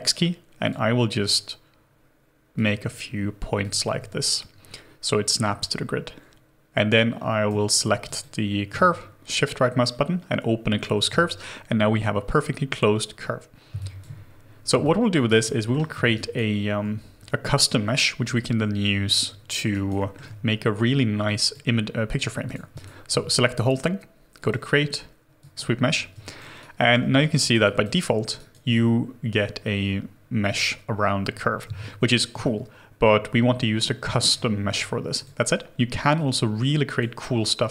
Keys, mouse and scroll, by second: 7.5 w, 8.8 shift+right click, 13.7 space, 14.8 alt+click, 15.3 alt+right click, 15.5 alt+middle click, 16.1 alt+right click, 19.7 alt+right click, 20.0 alt+middle click, 22.7 double click, 26.2 alt+click, 26.6 alt+right click, 27.0 alt+middle click, 27.3 alt+right click, 27.6 alt+click, 28.4 alt+right click, 31.7 shift+g, 32.4 alt+click, 34.0-36.4 scroll up 1.